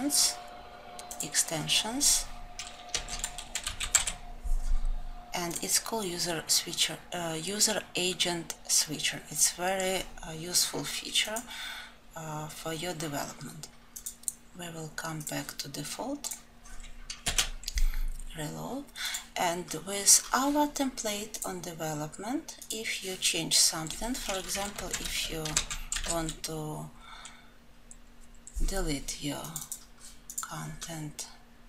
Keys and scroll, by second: 26.0 ctrl+shift+n.